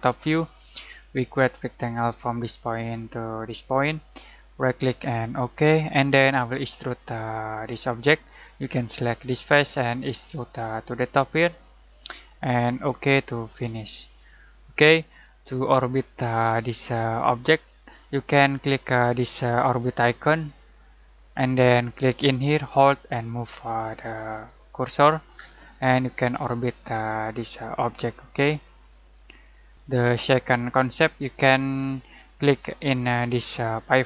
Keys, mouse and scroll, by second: 4.4 right click, 5.3-13.9 drag, 13.9-17.6 middle drag, 20.8-29.7 drag, 29.7 right click, 31.0 click.